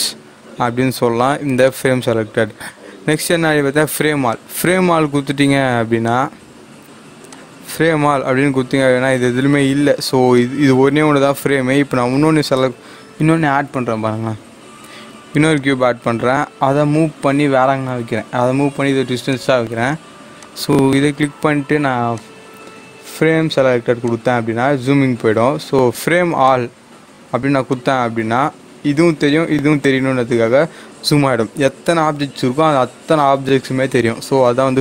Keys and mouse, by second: 4.2 click, 10.4-13.6 drag, 13.6 shift+a, 15.5 click, 17.9 g, 19.4 click, 26.4 click.